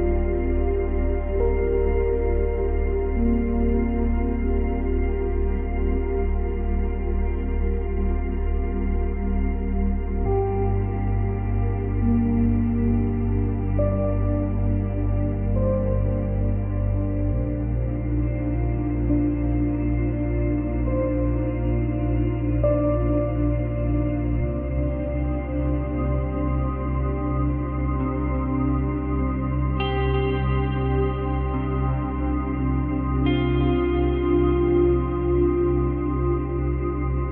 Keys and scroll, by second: 3.5 space, 6.7 space, 8.8 space, 9.7 space, 12.0 space, 12.8 space, 13.1 ctrl+z, 15.0 space, 17.8 space, 19.0 space, 19.9 space, 21.5 space, 23.2 space, 24.7 space, 26.4 space, 31.0 space, 34.5 space.